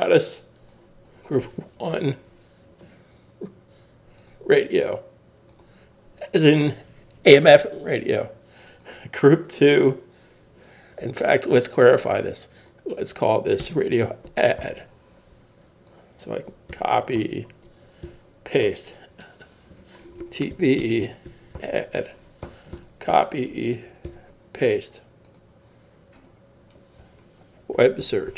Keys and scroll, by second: 14.0-15.1 typing, 16.7 super+c, 17.2 Tab, 18.0 super+v, 18.6 Tab, 21.3 shift+a, 22.4 super+a, 22.7 super+c, 23.1 Tab, 24.1 super+v, 27.7 shift+w, 28.0 shift+e.